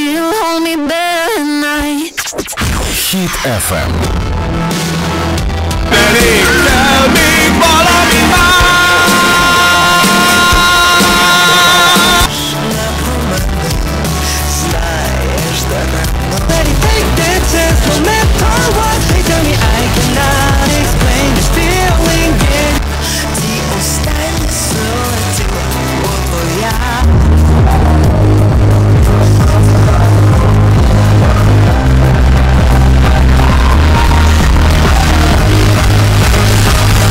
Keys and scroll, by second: 12.1 Page_Down, 22.7 Page_Down.